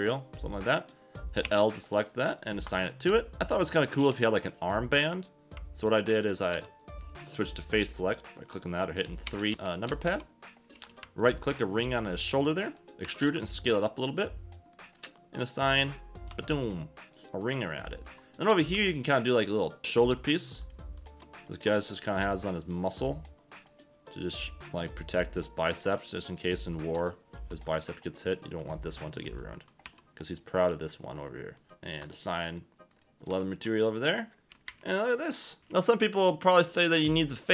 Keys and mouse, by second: 1.4 l, 2.7 click, 3.0 Tab, 4.1 Tab, 6.5 3, 7.9 click, 9.2-10.1 typing, 11.2 alt+click, 12.8 Escape, 12.8 ctrl+z, 12.8 e, 13.0 e, 13.2 s, 14.7 click, 15.8 click, 16.3 Tab, 17.0 middle click, 18.5 click, 18.7 Tab, 19.4 click, 20.2 shift+click, 23.5 shift+click, 26.3 shift+click, 26.7 shift+click, 27.7 shift+middle click, 29.8 e, 31.6 click, 31.7 ctrl+KP_Add, 32.0 click, 32.9 click, 33.3 Tab, 34.6 KP_1, 36.5 click.